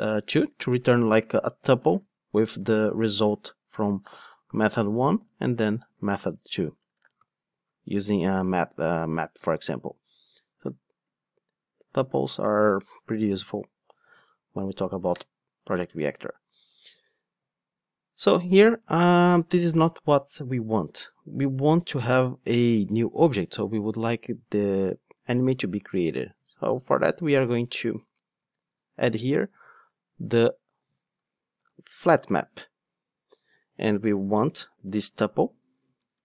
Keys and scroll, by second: 14.1 super+x, 26.4 super+x, 32.1 Return.